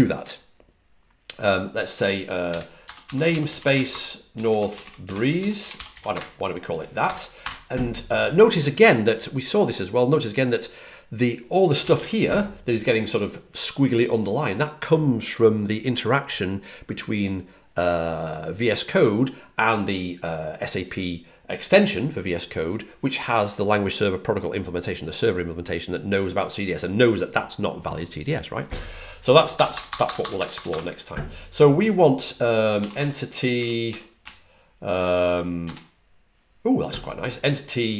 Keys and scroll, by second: 2.1-7.8 typing, 11.4-12.1 typing, 29.2-30.6 typing, 32.5-34.3 typing.